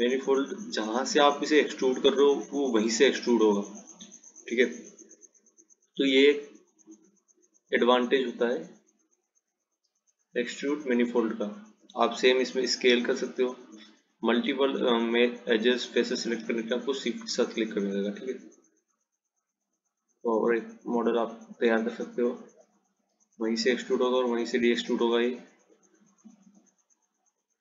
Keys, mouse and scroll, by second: 0.9 click, 7.1 click, 9.6-10.3 scroll up 1, 10.3-12.6 scroll down 3, 12.7 s, 19.9 click, 22.8 click, 27.1 click.